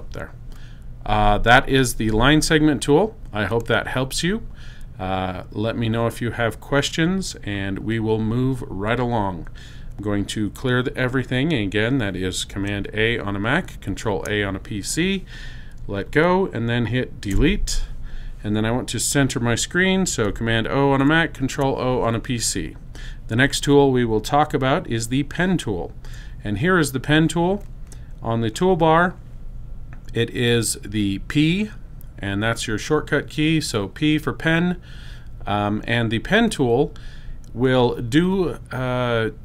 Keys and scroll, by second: 11.9 super+a, 17.2 BackSpace, 20.6 super+0, 31.2 p.